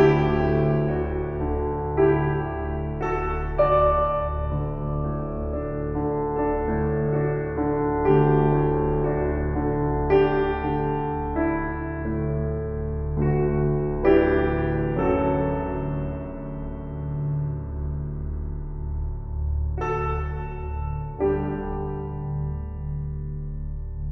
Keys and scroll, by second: 20.1 s, 22.8 shift+s.